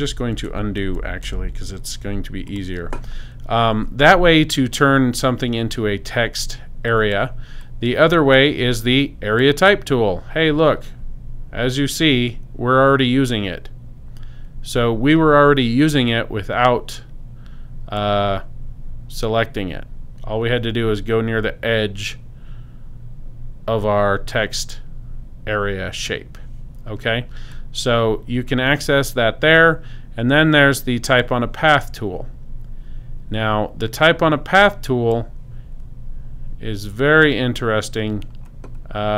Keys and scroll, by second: 0.0 super+z.